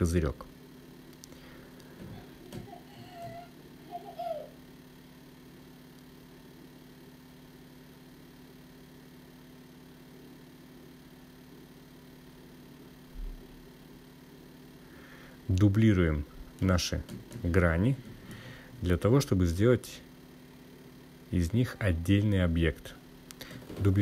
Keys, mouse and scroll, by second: 16.3 shift+d.